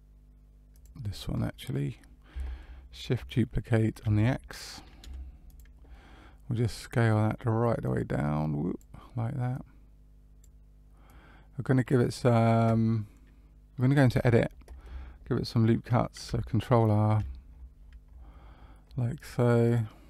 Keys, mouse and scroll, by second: 0.7 click, 1.3 middle click, 4.0 shift+d, 5.8 middle click, 7.8 click, 9.5 click, 11.0 click, 14.2 Tab, 17.2 ctrl+r.